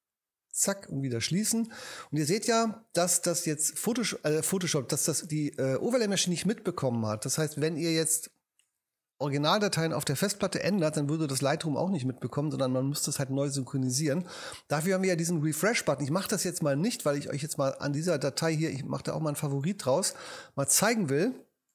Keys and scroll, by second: 0.8 super+w.